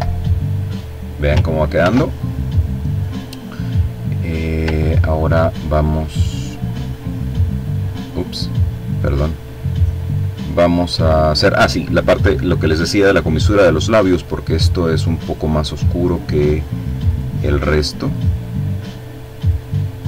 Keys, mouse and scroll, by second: 0.6 ctrl+z, 1.7-3.6 drag, 3.7-4.2 ctrl+scroll up 2, 5.1-5.5 ctrl+scroll up 2, 5.5 ctrl+click, 6.1-6.6 ctrl+scroll up 2, 6.6-7.2 scroll down 1, 7.3-10.6 drag, 12.0 click, 13.2 click, 14.1 click, 14.8 click, 15.9 click, 16.9 click, 18.1 click, 18.8 click, 19.9 click.